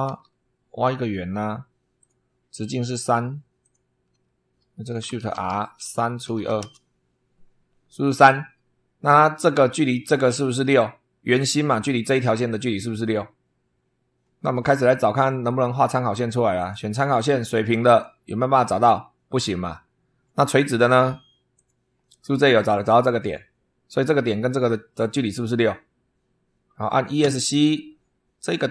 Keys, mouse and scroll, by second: 0.0 super+3, 1.9 click, 2.9 click, 3.5 click, 4.1 Escape, 4.7 shift+click, 5.1-6.8 typing, 16.5 click, 17.8 click, 21.5 click, 27.1 Escape.